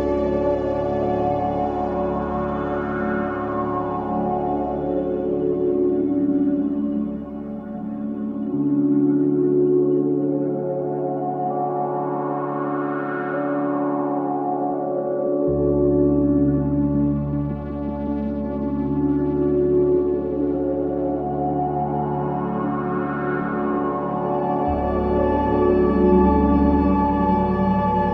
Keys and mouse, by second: 0.5 click, 1.5 click, 2.5 click, 4.2-5.5 drag, 6.0 click, 8.6-9.0 typing, 9.7 click, 10.7 click, 11.5-13.8 typing, 12.6 click, 13.8 click, 15.6-20.7 alt+shift+drag, 18.4 typing, 20.7-21.2 typing, 22.2-26.8 drag, 26.9 click, 27.5 typing.